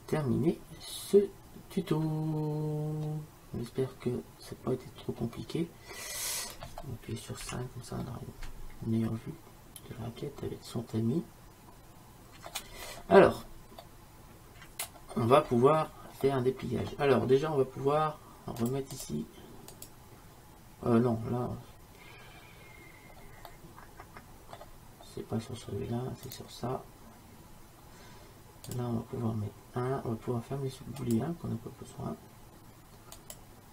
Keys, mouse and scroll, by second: 7.5 KP_5, 8.1 middle click, 8.7-10.1 middle drag, 12.9-18.7 middle drag, 18.7-21.8 drag, 23.6-26.4 middle drag, 26.4-28.2 right drag, 28.8-30.7 drag, 31.1-33.0 drag, 33.3-33.7 drag.